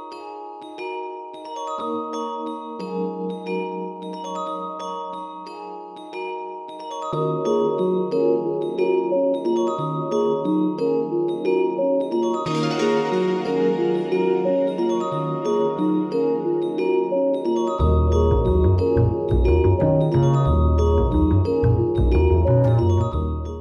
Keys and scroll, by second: 0.0 alt+super+c, 1.8 super+v, 9.1 alt+super+c, 11.2 super+v.